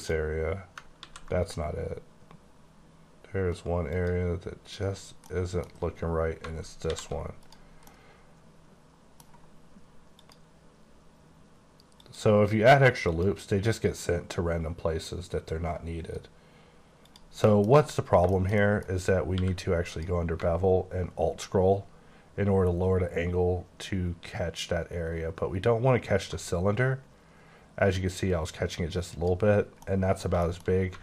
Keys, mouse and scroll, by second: 1.0 ctrl+z, 4.0 click, 5.3 middle click, 6.9 alt+v, 7.4 click, 8.1 middle click, 10.2 click, 12.0 click, 14.9 click, 17.0 click, 17.5 middle click, 17.7 scroll up 3, 18.3 shift+middle click, 18.9 scroll up 2, 19.3 q, 19.9 click, 20.5-21.4 alt+scroll down 10, 21.9-23.2 alt+scroll down 5, 23.2-25.0 alt+scroll up 1, 25.3-26.4 alt+scroll up 3, 29.1 click, 29.6 scroll down 5, 29.8 middle click.